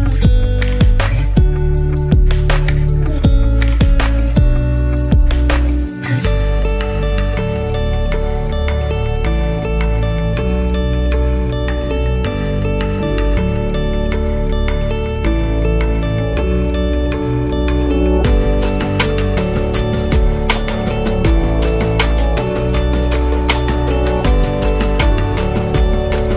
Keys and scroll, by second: 6.7-8.1 typing, 12.2-12.7 typing, 22.8-24.4 typing, 25.7-26.3 typing.